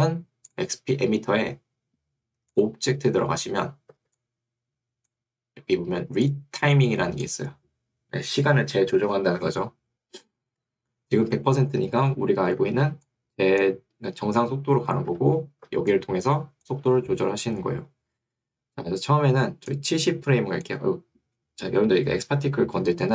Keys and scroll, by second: 10.7 Escape, 15.1 Escape, 15.9 2, 16.9 Escape.